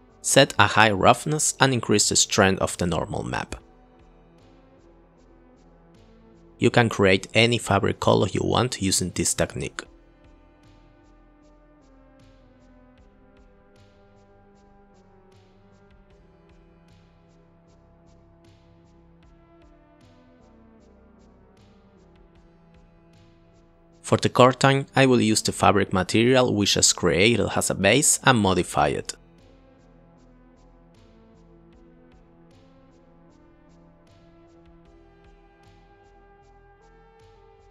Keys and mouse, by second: 0.1 click, 3.6 click, 6.3 click, 7.7 click, 8.1 click, 8.4 click, 8.8 shift+a, 10.3 shift+a, 11.2-11.8 drag, 12.0-13.4 drag, 14.4-15.0 drag, 15.6 click, 17.2-18.5 drag, 18.7 click, 19.3 click, 20.4-21.4 drag, 24.2 click, 24.3 click, 25.1 click, 26.8 ctrl+t, 27.1 click, 27.2 click, 27.7 click, 28.5 click, 28.9 click, 29.8 click, 30.8 click, 33.0 click, 35.9 click, 37.3 click.